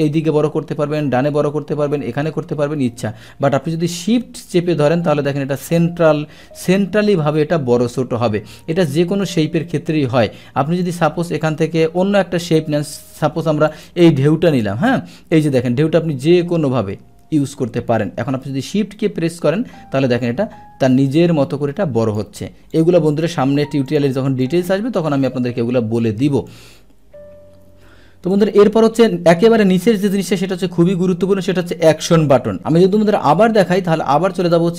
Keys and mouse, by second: 10.8 click, 13.7 click, 14.6-22.2 drag, 22.7 click, 23.9 click, 24.4 click, 26.0 click, 28.3 click, 32.6 click, 34.4 click.